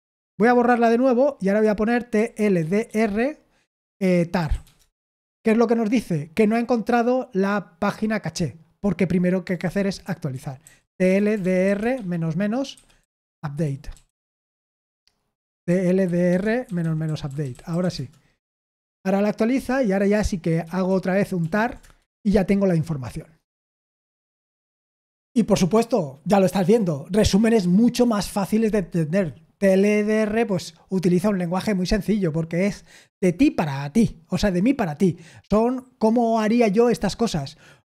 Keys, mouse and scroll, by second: 0.0 ctrl+p, 0.2 ctrl+p, 0.6 Return, 2.3-3.3 typing, 4.3-5.1 typing, 11.1-18.2 typing, 20.6 ctrl+p, 20.8 ctrl+p, 21.3 ctrl+p, 21.7 Return.